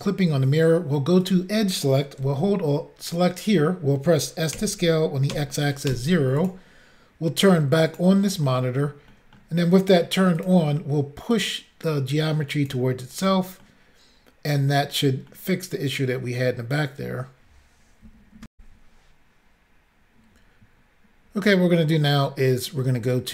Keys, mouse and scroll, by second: 1.3 click, 1.3 click, 3.1 alt+click, 3.2 alt+click, 4.6 s, 5.4 x, 6.5 click, 6.5 0, 7.9 click, 8.0 click, 8.5 middle click, 9.1 middle click, 10.4 click, 10.5 click, 11.4 click, 13.2 click, 13.3 click, 13.7 middle click, 15.4 middle click, 18.6 Insert.